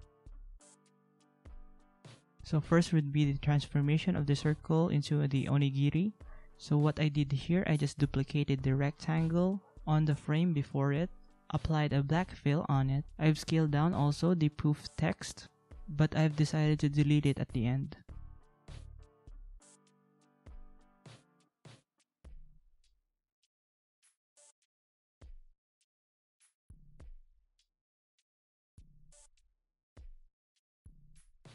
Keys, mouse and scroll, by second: 6.9 alt+click, 23.8 ctrl+z, 23.9 ctrl+x, 24.1 ctrl+z.